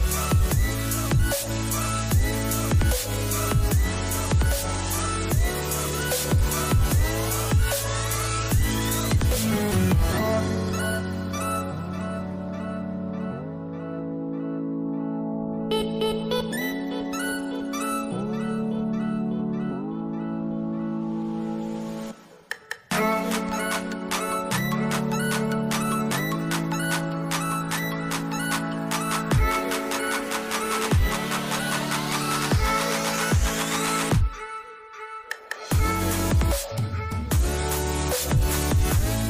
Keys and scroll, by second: 20.4 ctrl+a, 22.6 ctrl+a, 22.8 Escape, 23.8 Delete, 27.9 ctrl+a, 29.6 ctrl+a, 33.0 Delete, 36.8 space, 38.9 space.